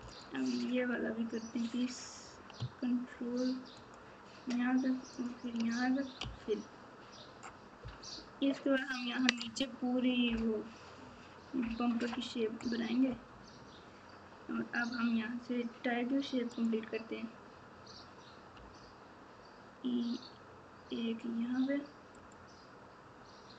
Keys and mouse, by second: 5.1 ctrl+click, 10.8 ctrl+KP_4.